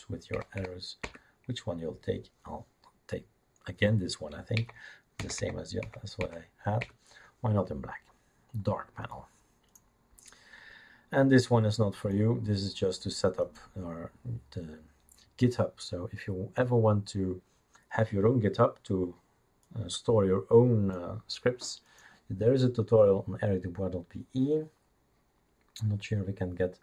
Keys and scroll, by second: 0.3 Down, 0.7 Down, 1.0 Up, 4.6 Page_Down, 4.7 Down, 5.2 Down, 5.4 Down, 5.8 Down, 6.2 Down, 6.8 Up.